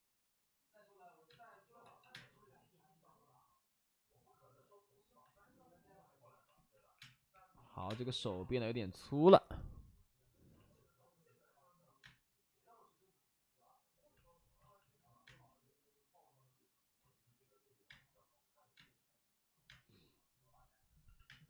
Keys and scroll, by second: 1.2 space, 1.6 3, 1.7 x, 2.0 space, 6.9-7.7 typing, 9.2 space, 10.5 ctrl+z, 11.9 space, 13.5 space, 13.6 space, 14.5 ctrl+z, 14.7 ctrl+z, 15.2 space, 16.9 ctrl+z, 17.9 space, 18.7 space, 19.6 space, 21.0 x, 21.2 space.